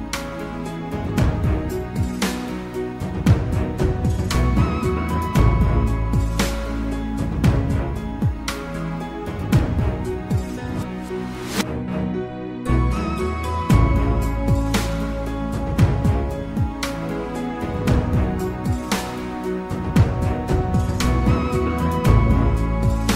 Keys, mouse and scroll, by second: 1.0 click, 6.1 Tab, 8.9 ctrl+r, 19.7-21.5 middle drag, 21.5 click.